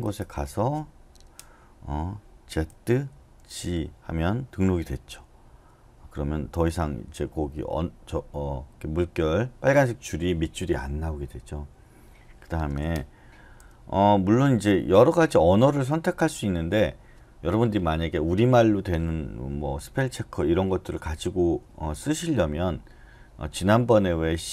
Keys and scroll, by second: 2.7-3.4 typing, 5.0 j, 5.5 j, 13.6 typing.